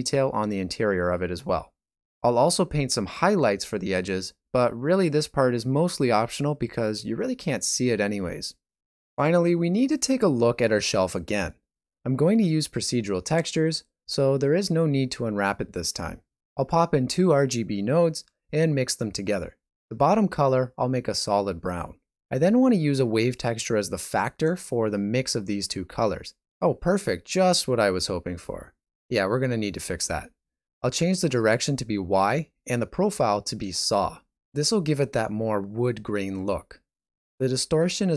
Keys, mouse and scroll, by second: 23.3 typing, 25.3 typing.